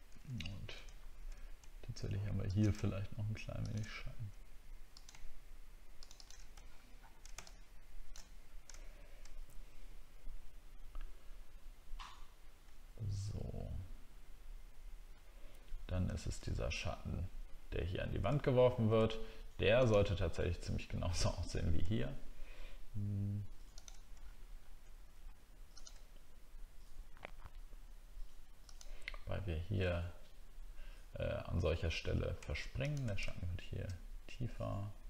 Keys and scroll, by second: 0.9 alt+scroll up 1, 6.6 alt+scroll down 1, 8.7 alt+scroll down 1, 18.3 alt+scroll up 1, 24.2 alt+scroll up 1.